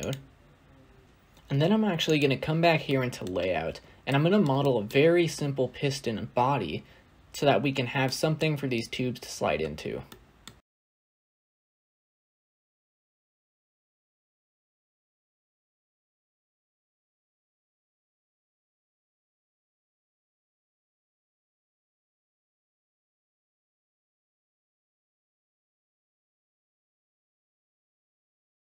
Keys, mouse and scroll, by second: 1.9 click, 2.5 scroll down 1, 2.6 scroll up 1, 2.8-3.2 middle drag, 3.2-3.7 scroll up 6, 3.7 scroll down 2, 3.9-10.4 middle drag, 10.4-11.4 scroll up 3, 11.4 shift+a, 11.5-11.8 scroll down 2, 11.8 s, 12.8 shift+middle click, 12.9 scroll up 2, 13.1 s, 13.6 shift+middle click, 13.9 Tab, 14.0 scroll down 2, 14.1 a, 14.6 s, 16.3 shift+middle click, 16.3 scroll up 3, 16.6 Tab, 16.9 3, 17.0 click, 22.2 scroll down 7, 22.2 middle click, 22.4-23.3 scroll up 3, 22.5 Tab, 23.4-24.2 drag, 24.2-24.9 scroll up 1, 24.9 drag, 25.1 scroll down 2, 25.2 shift+middle click, 25.3 scroll up 1, 25.6 shift+click, 27.1 click, 27.5 scroll down 1, 27.5-28.2 middle drag, 28.2-28.7 scroll down 1.